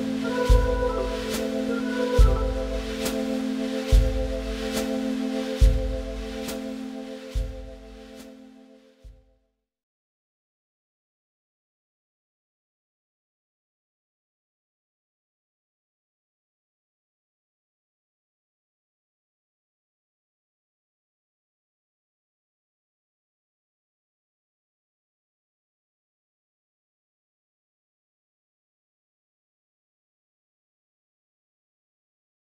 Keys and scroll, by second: 8.2 Delete, 18.3 shift+Page_Up, 21.7 ctrl+s, 24.8 Delete, 27.7 ctrl+s.